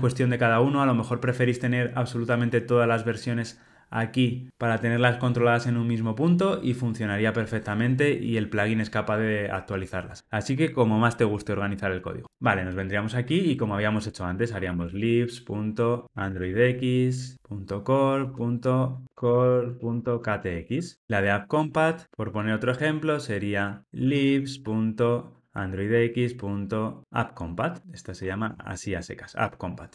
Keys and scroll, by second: 17.8 Tab, 20.9 Escape, 22.0 alt+shift+Left, 25.4 Return, 27.6 Tab.